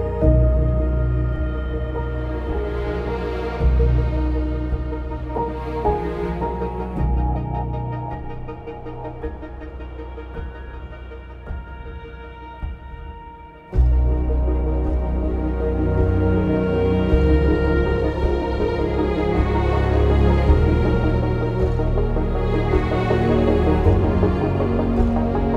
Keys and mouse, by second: 0.5 2, 1.9 ctrl+b, 3.6 ctrl+r, 4.5 click, 5.0 ctrl+r, 5.2 ctrl+click, 6.3 click, 9.2 ctrl+b, 9.9 click, 10.3 shift+middle click, 11.0 1, 13.1 k, 13.5 click, 14.3 click, 15.2 Return, 15.7 \, 16.0 click, 16.0 3, 16.8 click, 17.5 2, 18.6 ctrl+x, 19.7 1, 19.7 g, 20.8 2, 21.8 ctrl+b, 22.8 click, 23.2 ctrl+g, 24.6 ctrl+b, 25.2 click.